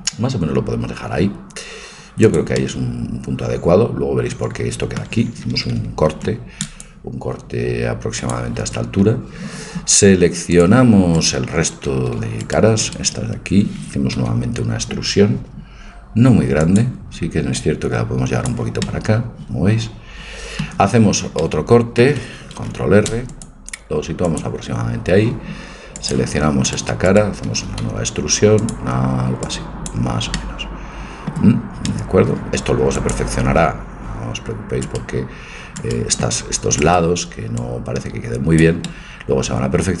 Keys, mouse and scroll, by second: 6.1 ctrl+r, 10.5-12.3 drag, 11.2-14.7 right drag, 14.2 e, 17.7-18.8 drag, 18.8 middle click, 19.4 click, 22.6 ctrl+r, 26.0-28.0 drag, 26.7-29.0 right drag, 27.8 e, 29.5 click, 30.4-31.9 middle drag, 33.0-34.8 drag, 34.8-38.6 right drag, 37.6-38.9 drag, 38.6 middle click, 38.9-40.0 middle drag.